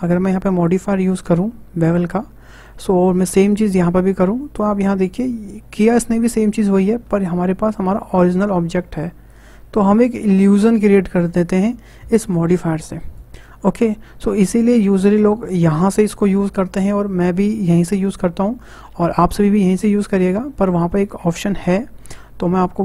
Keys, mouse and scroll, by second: 0.7-2.4 drag, 2.4-3.6 shift+middle drag, 3.6-5.6 drag, 5.6-7.1 middle drag, 7.1 Tab, 7.5-8.2 middle drag, 8.2 click, 8.5 middle click, 9.3 click.